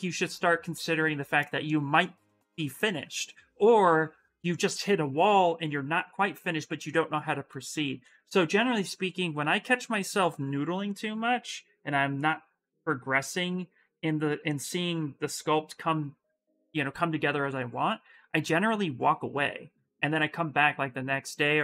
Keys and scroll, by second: 11.2 s.